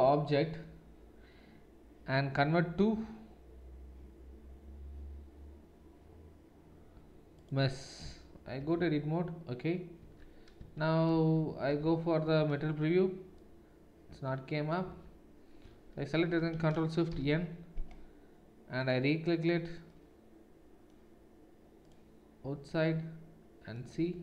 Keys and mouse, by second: 9.8 Tab, 10.4 Tab, 11.2 shift+z, 11.9 z, 14.9 Tab, 15.6 a, 17.2 ctrl+shift+n, 21.9-24.2 middle drag, 23.9 Tab.